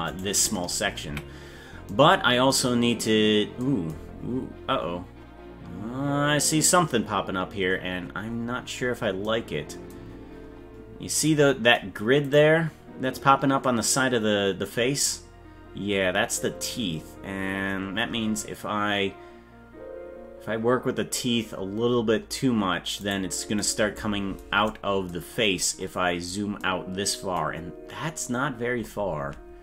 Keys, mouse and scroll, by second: 0.1 right click, 1.0 KP_Decimal, 2.9-3.2 scroll down 3, 4.1-5.4 scroll down 9, 6.2 scroll down 3, 7.7-9.2 scroll up 19, 10.1-11.0 scroll down 5, 12.2 right click, 17.7-18.6 scroll down 8, 19.6-21.1 scroll up 9, 21.3-22.1 scroll up 12, 23.0 right click, 25.3-26.1 scroll down 18, 28.5-29.4 scroll up 15.